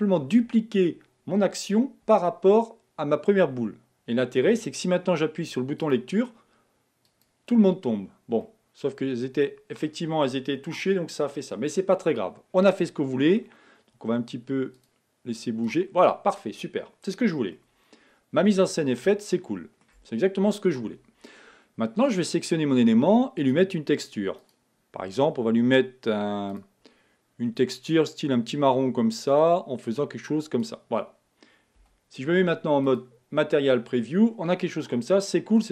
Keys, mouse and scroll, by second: 5.8-7.4 drag, 8.5-9.9 middle drag, 9.9-10.4 scroll up 1, 12.7-14.8 middle drag, 14.8-15.9 drag, 17.7-22.1 middle drag, 22.1 click, 23.4 click, 24.4 click, 26.5-28.0 drag, 31.8 z, 34.2-35.7 middle drag.